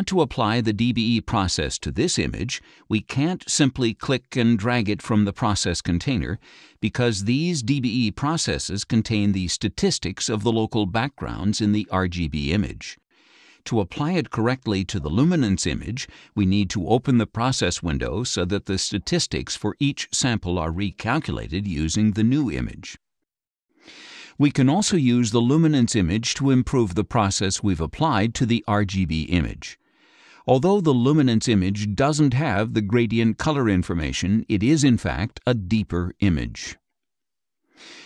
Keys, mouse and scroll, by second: 2.2-6.7 drag, 6.4 Escape, 7.8 click, 8.5-10.2 drag, 11.3 click, 12.2 click, 13.2 click, 16.5 click, 19.1 click, 21.4 click, 22.5 click, 23.5-24.9 drag, 28.6 click, 30.1 click.